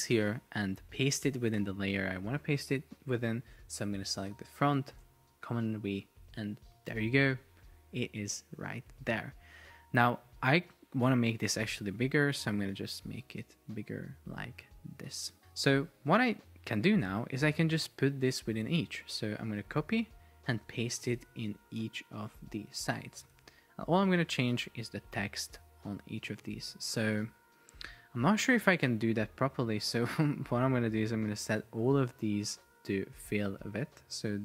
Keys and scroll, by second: 5.0 super+v, 19.5 super+c, 20.7 super+v, 21.9 super+v, 22.5 super+v, 23.6 super+v, 28.6 Escape.